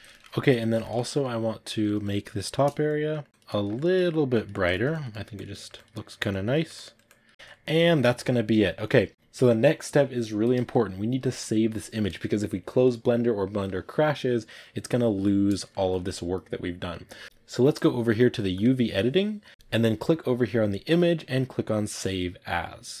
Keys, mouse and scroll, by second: 2.8 click, 3.1 middle click, 3.3 click, 3.4 shift+middle click, 4.2 click, 4.4 ctrl+middle click, 4.8 click, 5.0 middle click, 5.2 click, 5.4 middle click, 5.6 click, 5.8 middle click, 6.2 click, 6.4 middle click, 6.6 click, 7.2-18.5 ctrl+middle drag, 18.5-23.0 drag.